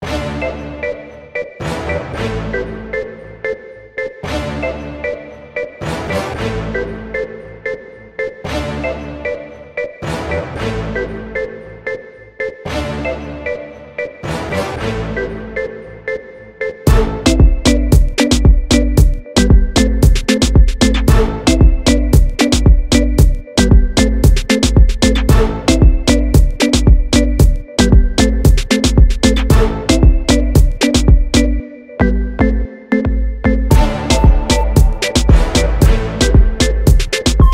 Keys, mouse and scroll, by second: 0.1 alt+click, 0.3 scroll up 1, 1.3 g, 2.1 alt+click, 2.3 scroll down 2, 2.6-3.7 scroll up 2, 3.7-4.0 scroll down 2, 4.0-4.5 scroll up 2, 4.5-4.9 scroll down 2, 4.9 g, 6.3 alt+click, 6.9 g, 7.3 click, 8.1 middle click, 8.1-8.4 scroll down 2, 8.4-8.8 scroll up 2, 9.0-9.7 scroll down 1, 9.7 alt+click, 10.5 scroll down 1, 10.8 `, 11.2-12.0 scroll up 1, 12.0 alt+s, 14.0-17.9 typing, 14.4-15.0 scroll up 2, 15.0 Tab, 16.1 scroll up 1, 17.4 scroll up 2, 18.3-18.7 scroll down 2, 19.4 KP_Decimal, 19.7 scroll up 1, 20.3-20.9 scroll up 2, 21.8 alt+s, 23.0-23.4 scroll down 1, 23.6 scroll down 1, 24.9 scroll up 1, 25.8 scroll up 1, 26.3 `, 27.0 scroll up 1, 27.5 `, 28.3 alt+a, 28.7 Tab, 30.0 click, 30.3 scroll down 1, 31.2 alt+a, 34.0 `.